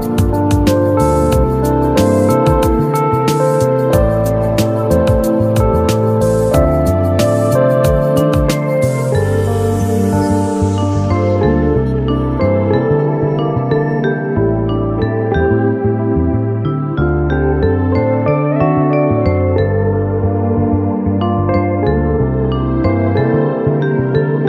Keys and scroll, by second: 20.3 ctrl+a.